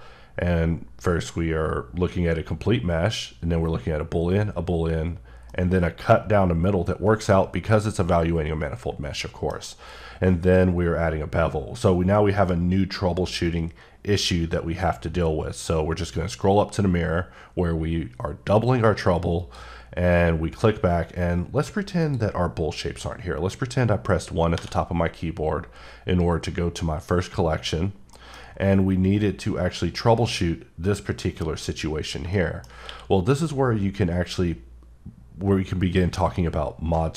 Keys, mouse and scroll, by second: 0.0-1.3 scroll up 1, 2.8-3.9 scroll up 1, 3.9 scroll up 1, 4.7-5.3 scroll up 1, 5.5 middle click, 9.8-10.6 scroll up 1, 16.0-17.3 scroll up 2, 19.4 click, 22.6 click, 24.5 1, 28.2 middle click, 28.4 scroll up 3, 32.3 shift+Num_Lock, 32.3 shift+middle click, 32.8 q.